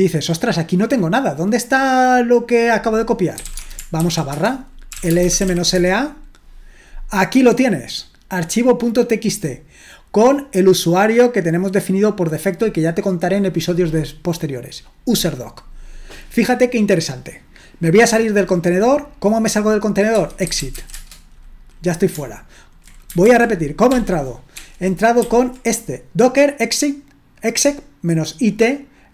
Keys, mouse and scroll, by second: 3.2-5.9 typing, 8.3-9.8 drag, 10.5-11.5 drag, 20.2-21.3 typing, 23.3 ctrl+l, 23.9 ctrl+p, 24.6 ctrl+p, 25.2 ctrl+n.